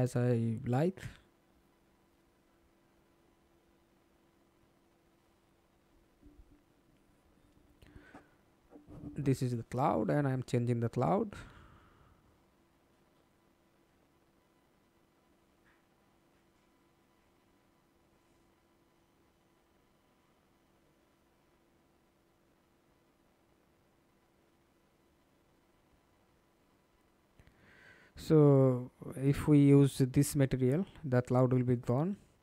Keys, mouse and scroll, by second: 4.2-5.0 scroll down 2, 5.0-6.9 scroll down 5, 6.9-7.8 scroll down 1, 8.0 alt+click, 11.3 Escape, 11.8-12.1 scroll down 4, 12.2-12.9 scroll up 1, 13.1 F11, 14.1 alt+click, 15.9 ctrl+space, 20.4 middle click, 23.1 scroll down 1, 23.6-25.4 scroll down 1, 25.4-26.1 scroll down 7, 26.1-27.8 scroll up 1, 29.6 double click.